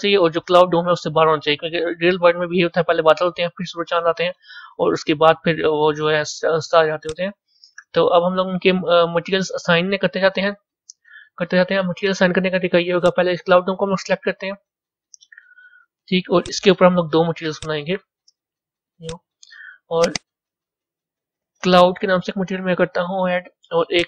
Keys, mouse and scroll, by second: 6.9 click, 7.5-11.9 middle drag, 11.9-12.9 scroll up 2, 12.9 click, 16.3 click, 17.4-19.1 drag, 19.9 click, 20.1-23.1 drag, 23.8 drag.